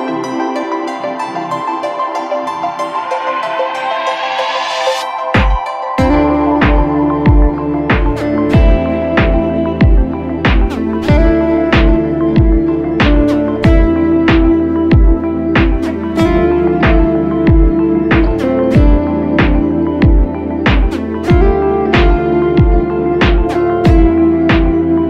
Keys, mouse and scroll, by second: 0.0-3.1 typing, 5.0-6.1 typing, 7.5 typing, 9.1 typing, 9.3 ctrl+-, 9.5 ctrl+-, 10.0 ctrl+-, 10.6 ctrl+-, 18.3-19.4 alt+scroll up 1, 19.4-21.3 scroll down 1.